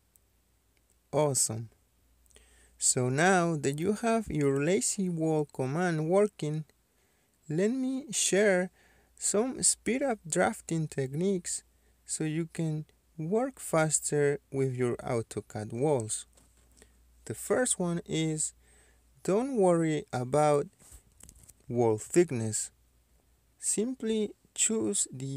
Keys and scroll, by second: 7.7 Escape, 16.2 Escape, 18.0 F2.